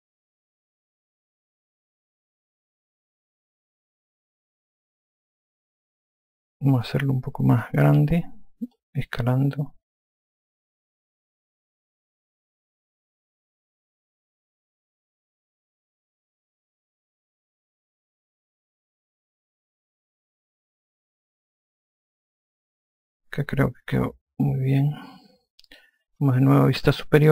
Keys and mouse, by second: 1.9 r, 3.3 click, 5.2 alt+click, 9.1 click, 12.5 alt+click, 14.7 e, 15.6 click, 22.4 alt+click, 27.2 F2.